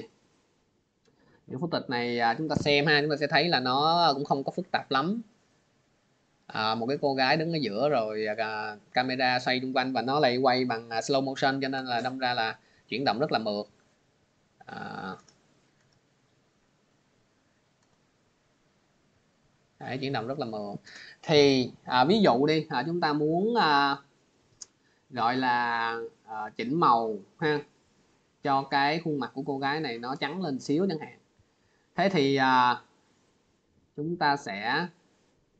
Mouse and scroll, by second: 0.6 scroll, 2.9 click, 15.7 click, 16.8 click, 17.6 click, 22.2 click, 22.6 middle click, 22.8 middle click, 23.6 middle click, 25.0 middle click, 27.9 scroll, 28.8 scroll, 30.0 scroll, 32.3 click.